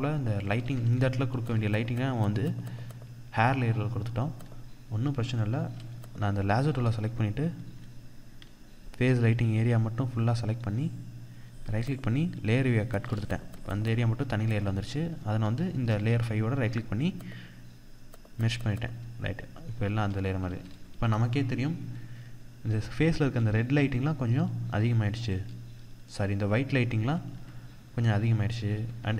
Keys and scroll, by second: 0.0 ctrl+=, 3.3 ctrl+=, 19.8 ctrl+-, 20.3 ctrl+0, 22.6 ctrl+=, 26.5 ctrl+=, 28.2 ctrl+=.